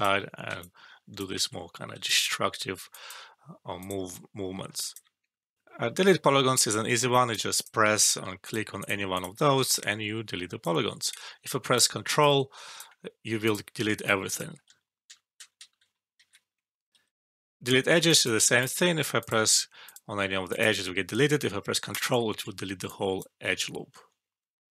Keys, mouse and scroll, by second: 0.6-1.2 alt+click, 1.3 ctrl+alt+z, 2.0 alt+click, 2.9 alt+click, 4.5 alt+middle click, 4.8 alt+click, 5.5 alt+F12, 6.8 alt+middle click, 7.1 alt+click, 7.5 click, 9.6-10.2 alt+click, 10.9-11.5 alt+click, 12.1-12.7 alt+click, 14.0-14.6 alt+click, 14.6 ctrl+z, 17.8 alt+middle click, 18.0 alt+click, 21.8 ctrl+click, 22.5 alt+middle click, 22.8 alt+click, 23.6 alt+middle click.